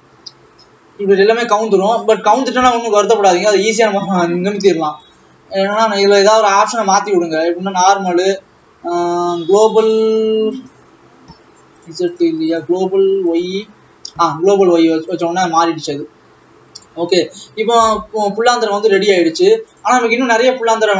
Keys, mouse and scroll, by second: 6.7-12.7 drag, 13.5-15.5 drag, 19.5 ctrl+s, 20.2 click.